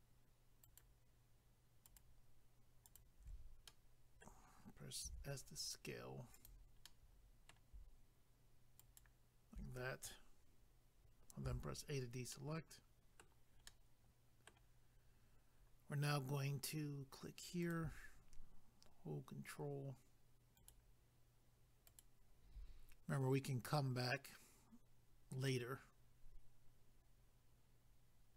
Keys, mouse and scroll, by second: 0.6 ctrl+right click, 0.8 ctrl+right click, 1.8 ctrl+right click, 2.0 ctrl+right click, 2.8 ctrl+right click, 3.0 ctrl+right click, 3.7 middle click, 5.0 s, 6.3 click, 6.4 click, 6.8 middle click, 8.8 ctrl+right click, 12.3 middle click, 12.3 a, 13.6 middle click, 14.9 scroll up 1, 17.6 click, 17.7 click, 20.6 ctrl+right click, 20.7 ctrl+right click, 21.9 ctrl+right click, 22.0 ctrl+right click, 25.5 middle click.